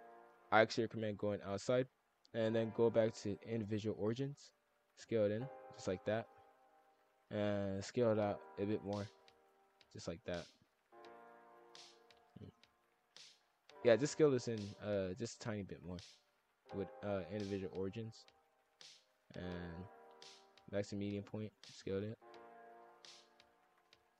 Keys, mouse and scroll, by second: 0.4 s, 2.7-4.5 drag, 4.5 s, 6.0 scroll down 2, 6.2-7.5 middle drag, 7.5-9.2 drag, 9.2 s, 11.0 middle click, 11.5 scroll down 1, 11.7 middle click, 12.2 scroll down 4, 12.4 scroll up 1, 12.4 middle click, 13.0-14.4 scroll up 5, 14.4 click, 14.7-16.4 drag, 16.4 s, 18.0 click, 19.4-20.9 drag, 20.9 s, 22.2 middle click, 22.5 scroll down 1, 22.7 middle click, 23.4 scroll down 1, 23.7 scroll up 1, 23.7 middle click.